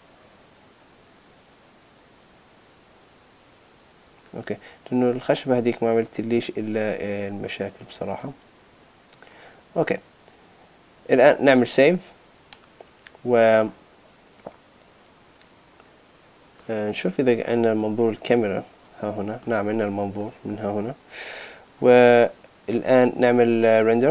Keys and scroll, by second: 11.6 super+s.